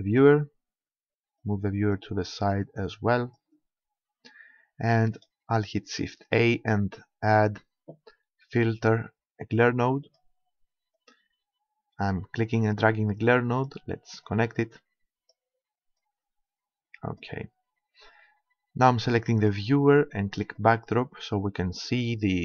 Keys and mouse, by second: 1.4-4.3 drag, 5.2-7.1 drag, 6.2 shift+a, 11.0-13.0 drag, 14.3-18.0 drag, 19.4-22.4 drag.